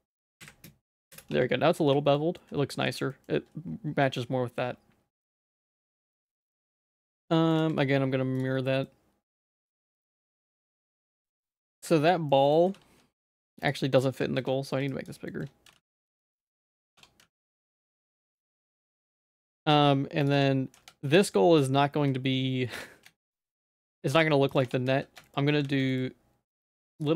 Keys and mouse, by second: 1.3 Tab, 2.1 shift+middle click, 2.4 middle click, 2.9 ctrl+s, 3.1 middle click, 4.0 shift+middle click, 5.4 middle click, 5.8 Tab, 6.0 middle click, 6.4 Tab, 7.6 alt+x, 8.4 click, 8.9 middle click, 9.7 shift+middle click, 10.1 click, 10.3 h, 10.5 middle click, 11.0 ctrl+z, 11.3 middle click, 12.0 shift+middle click, 12.3 middle click, 12.7 g, 14.2 Tab, 14.4 z, 15.0 shift+click, 15.3 shift+middle click, 15.7 g, 17.0 Tab, 17.2 z, 17.6 shift+middle click, 18.2 middle click, 18.4 Tab, 18.7 z, 19.1 g, 20.4 Tab, 20.8 z, 21.2 shift+middle click, 22.8 Tab, 23.1 z, 23.6 g, 24.7 Tab, 24.9 z, 25.3 shift+middle click, 25.7 ctrl+s, 25.9 middle click, 26.5 click.